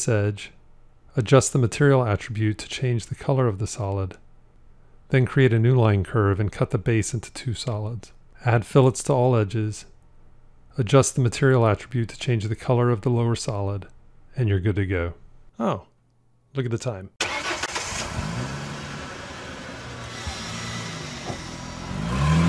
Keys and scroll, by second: 1.1 m, 7.2 c.